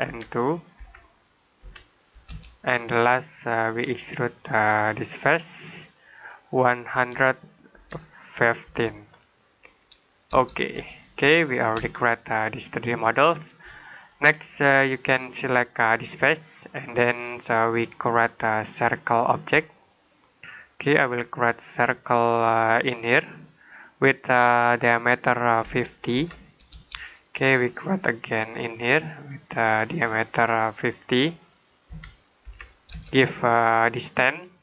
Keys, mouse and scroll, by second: 0.0-1.5 typing, 2.1 Return, 3.7 click, 6.8-8.5 typing, 10.2 Return, 10.9 middle click, 11.8 shift+middle click, 15.9 click, 20.1 middle click, 23.7 click, 25.5-26.0 typing, 26.6 Return, 29.6 click, 31.7-32.8 typing.